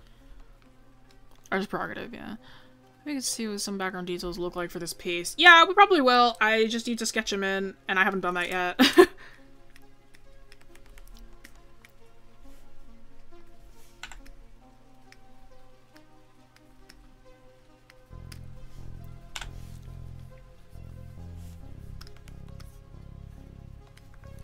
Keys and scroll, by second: 24.2 scroll up 1.